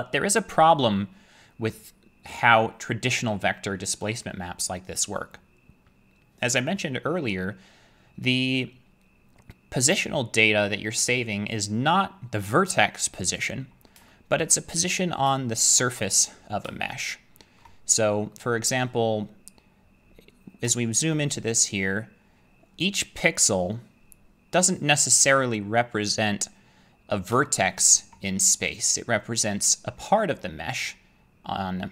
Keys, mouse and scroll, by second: 13.5-14.0 scroll, 14.4 shift+middle click, 14.8-15.4 scroll, 15.7 shift+middle click, 16.0-16.8 scroll, 17.6 shift+middle click, 17.9-18.4 scroll, 18.9-19.5 scroll, 19.5-20.7 scroll, 20.7-21.1 scroll, 21.1-22.6 shift+middle click, 21.3-22.1 scroll, 27.3 middle click, 28.0 shift+middle click, 28.7 middle click.